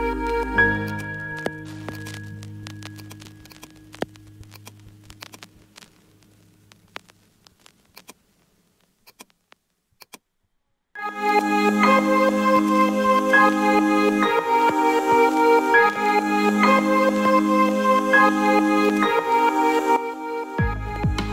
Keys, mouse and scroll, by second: 0.8-1.4 ctrl+alt+middle drag, 1.8 click, 2.9 shift+click, 3.5-4.4 alt+middle drag, 4.5-4.9 ctrl+alt+middle drag, 5.2-5.7 alt+shift+middle drag, 8.0 click, 9.1 click, 10.0 click, 11.2 click, 12.5 click, 13.1-13.7 middle drag, 14.1 KP_0, 18.8-21.3 drag.